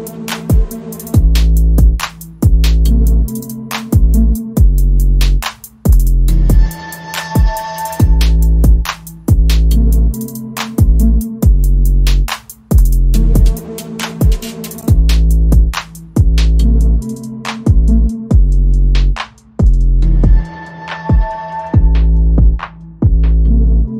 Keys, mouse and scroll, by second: 0.3 r, 1.6 g, 2.5 middle click, 3.0 middle click, 3.5 g, 4.2 middle click, 5.9 middle click, 6.7 KP_1, 8.3 g, 8.8 r, 13.5 middle click, 13.9 middle click, 14.0 r, 15.6 middle click, 16.0 KP_1, 16.9 shift+d, 17.3 r, 19.2 s, 20.2 middle click, 20.8 middle click, 21.2 s, 22.1 KP_1, 22.6 g.